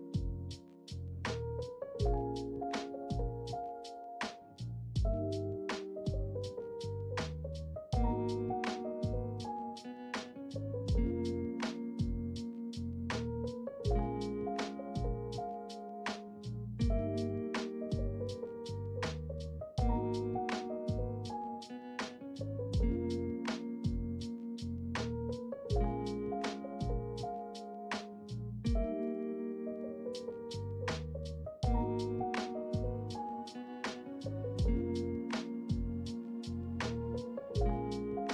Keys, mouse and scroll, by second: 1.9 middle click, 3.1 ctrl+middle click, 3.8 shift+middle click, 6.4 e, 6.9 s, 11.0 e, 11.5 z, 12.8 click, 13.5 e, 13.9 s, 15.9 e, 16.4 s, 17.8 m, 19.2 ctrl+middle click, 20.1 middle click, 20.6 ctrl+middle click, 21.1 shift+middle click, 21.9 middle click, 23.1 ctrl+middle click, 26.2 e, 26.4 s, 28.3 `, 31.0 ctrl+click.